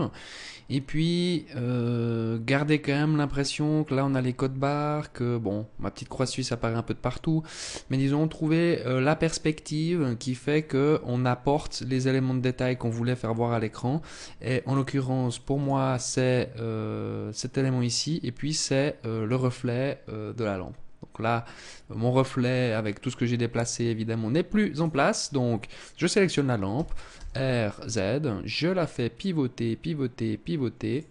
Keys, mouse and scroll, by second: 14.1 click, 24.2 right click, 26.2 r, 30.4 click.